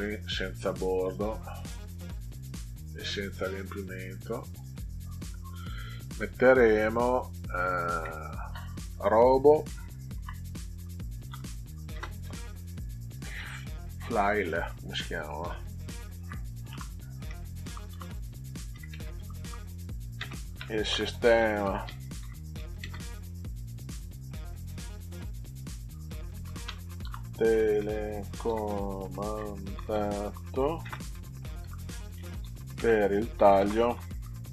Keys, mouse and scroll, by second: 1.0 click, 3.7 click, 4.5 click, 6.1 click, 6.9 click, 7.5 click, 10.1-11.9 typing, 16.1 shift+f, 17.2 s, 17.7 o, 18.9-23.0 typing, 26.2-34.5 typing.